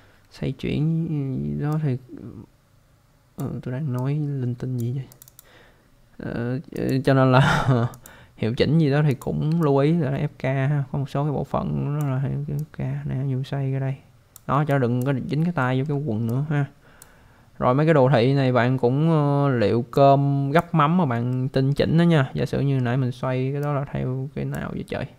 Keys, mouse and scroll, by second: 1.7 click, 5.1 click, 5.2 click, 5.4 double click, 6.9 click, 7.9 click, 9.1 click, 9.6 alt+click, 12.6 click, 14.7 alt+click, 15.6 alt+middle click, 16.2 click, 17.7 scroll down 1, 19.9 click, 21.3 alt+middle click, 22.4 alt+middle click, 23.6 click.